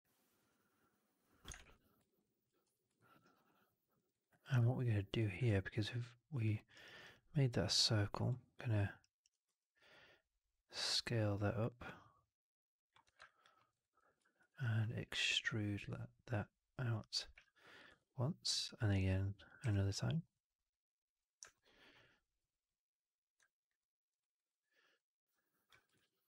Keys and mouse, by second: 1.6 shift+x, 2.0 right click, 2.1 click, 2.7 4, 2.9 alt+middle click, 3.1 alt+middle click, 3.3 alt+middle click, 3.6 alt+click, 3.9 alt+middle click, 4.0 alt+middle click, 4.2 alt+click, 4.7 3, 5.4 alt+click, 6.5 alt+middle click, 6.6 alt+right click, 6.9 alt+right click, 7.0 alt+click, 8.2 alt+click, 8.9 alt+right click, 9.4 r, 12.4 middle click, 13.1 w, 13.1 alt+click, 13.5 alt+middle click, 13.6 alt+right click, 13.9 alt+click, 14.3 ctrl+e, 16.2 click, 17.2 w, 17.8 ctrl+e, 19.6 click, 19.6 w, 21.0 click, 21.4 alt+middle click, 23.7 alt+middle click, 24.1 alt+right click, 25.8 shift+f.